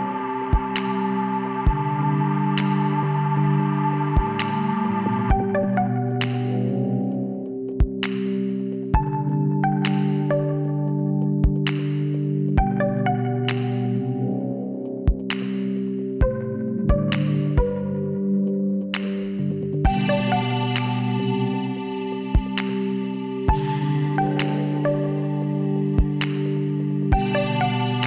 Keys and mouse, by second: 1.0 s, 5.2 middle click, 6.1 s, 9.6-10.7 middle drag, 11.4-13.9 middle drag, 15.2 KP_7, 18.3 a, 19.2 z, 21.5 z, 24.2 shift+a, 26.5 s.